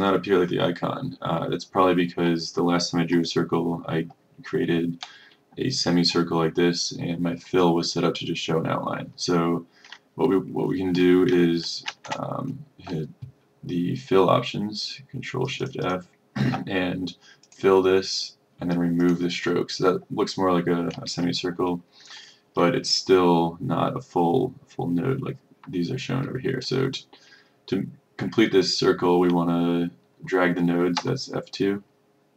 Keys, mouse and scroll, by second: 11.9 ctrl+shift+f, 15.5-18.2 drag, 31.1 F2.